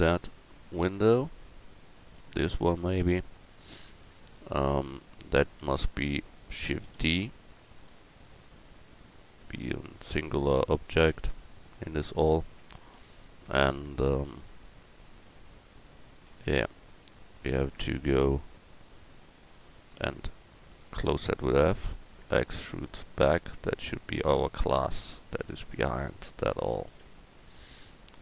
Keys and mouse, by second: 0.9-2.9 right drag, 5.8-6.8 middle drag, 6.8 shift+d, 12.6 Tab, 13.6 Tab, 16.3 Tab, 18.5 Tab, 21.1 f, 22.3 e, 23.1-25.5 drag, 27.0 Tab, 28.0 right click.